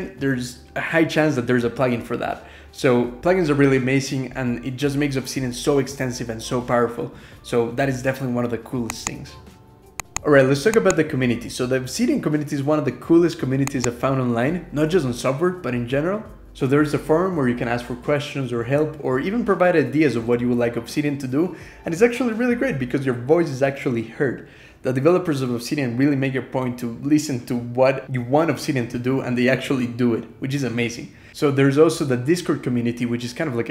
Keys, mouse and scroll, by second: 1.2-3.0 typing, 3.1 ctrl+-, 3.4 scroll down 2, 3.8 click.